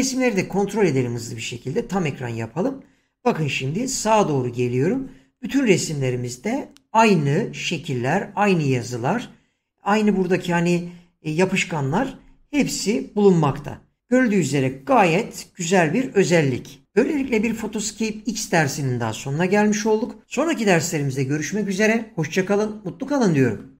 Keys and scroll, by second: 1.7 Return, 3.8 Right, 12.5 Right.